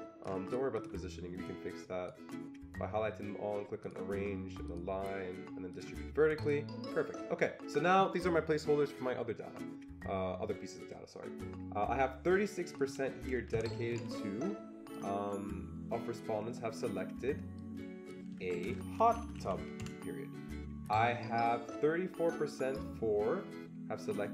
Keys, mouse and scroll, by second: 0.8 ctrl+shift+click, 1.7-4.6 drag, 4.6-5.7 drag, 5.7 click, 6.4 click, 12.7 click, 12.8 click, 13.6 Delete, 13.6-14.4 typing, 15.0 click, 17.6-18.9 drag, 18.4-19.6 typing, 21.6-22.4 typing.